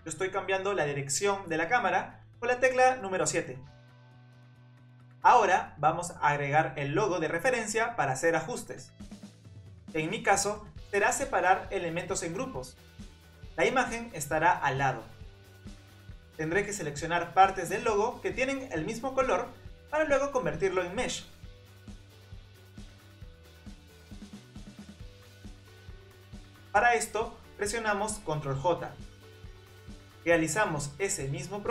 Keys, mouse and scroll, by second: 3.0 KP_7, 4.1-4.6 drag, 5.7-8.7 drag, 8.9 scroll down 18, 9.2 s, 10.0 scroll up 13, 10.3 s, 11.5 g, 12.3-13.8 scroll up 7, 13.8 s, 14.6 g, 15.9-16.4 scroll up 1, 17.6 click, 19.9 click, 20.8 click, 25.0 shift+click, 26.4 shift+click, 27.6 ctrl+j, 29.9 click, 30.0 click, 31.2 shift+click.